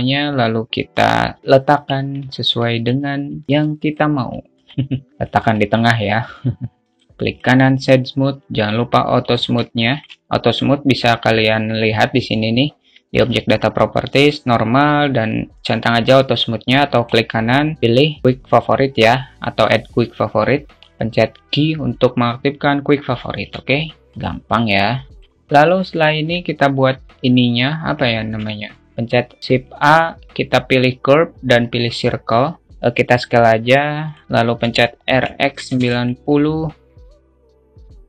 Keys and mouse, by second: 2.4 Tab, 2.6 alt+middle click, 3.5 alt+middle click, 3.8 `, 5.0 click, 5.7 `, 6.7 middle click, 8.6 q, 9.7 alt+middle click, 10.1 alt+middle click, 17.5-20.7 right drag, 22.2 t, 22.3 q, 24.4-25.4 alt+middle drag, 26.3-26.7 alt+shift+middle drag, 28.5 alt+shift+middle click, 28.9 shift+a, 32.7 s, 33.1 s, 35.0 r, 37.3-38.0 drag.